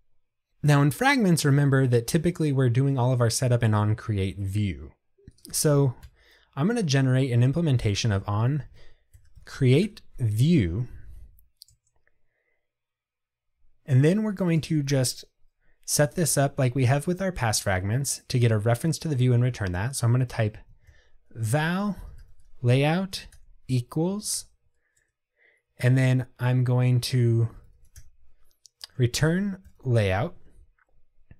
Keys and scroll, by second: 10.0 Return, 30.3 Escape.